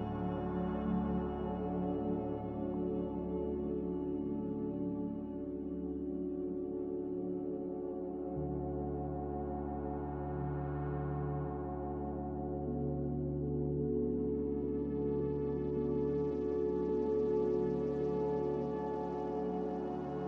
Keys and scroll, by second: 6.8 m, 7.9 a.